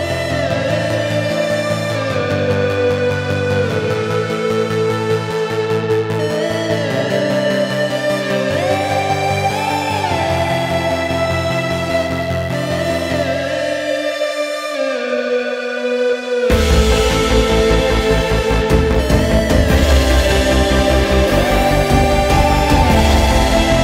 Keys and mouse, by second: 13.6 click, 17.2 shift+a.